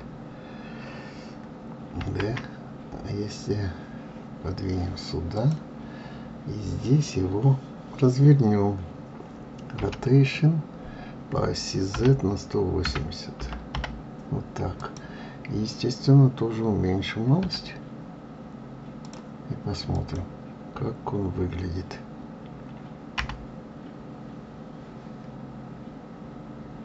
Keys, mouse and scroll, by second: 2.0 shift+d, 19.9 click.